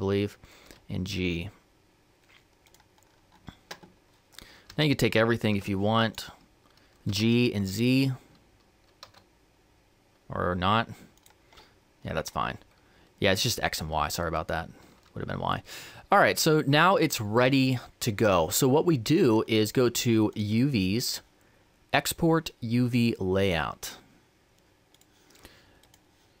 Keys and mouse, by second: 0.5 b, 0.5 g, 4.5 a, 6.9 b, 6.9 g, 24.4-26.4 drag.